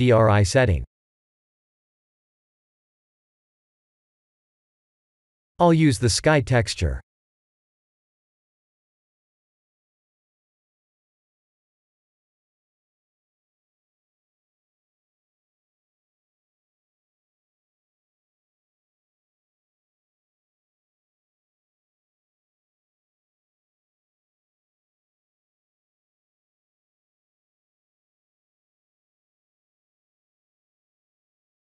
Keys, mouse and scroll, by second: 0.6 click, 5.3 click, 6.6 click, 9.4 click, 11.5 click, 15.1 click, 21.2 click, 28.0 click.